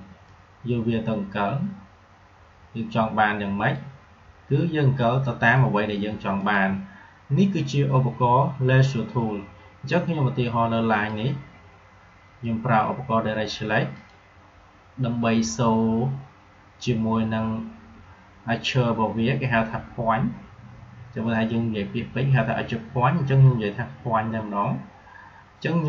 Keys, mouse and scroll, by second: 6.3 click, 10.8 click, 13.8 click.